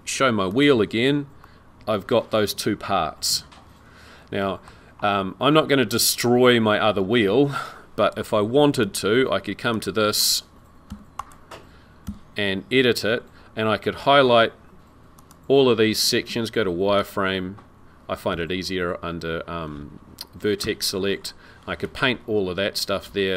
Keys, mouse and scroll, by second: 0.5 click, 1.4 middle click, 5.4-8.1 scroll down 2, 8.8 click, 9.7 click, 10.9 Tab, 11.2 click, 12.2 Tab, 13.0-13.5 scroll up 5, 15.2 click, 16.3 z, 18.5 1, 20.6 c.